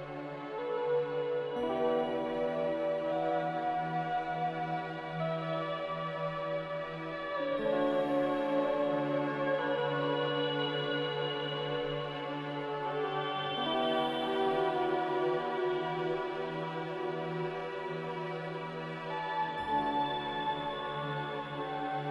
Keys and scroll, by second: 1.4 z, 7.1 Escape, 10.2 b, 12.5-14.3 typing, 19.1 z.